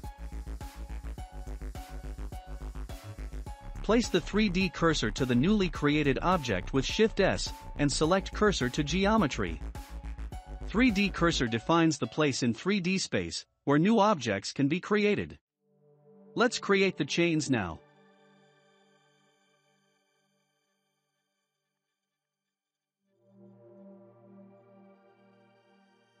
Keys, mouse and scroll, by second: 2.0 click, 5.1 shift+s, 7.8-8.5 scroll up 1, 8.5-10.1 middle drag, 10.1 shift+d, 12.2-12.9 middle drag, 12.9 scroll up 2, 13.4-13.9 middle drag, 13.9 scroll up 1, 14.7-16.1 middle drag, 17.5 s, 21.1 s, 22.9 ctrl+a, 24.2-25.1 scroll up 2, 25.2-26.2 scroll down 1.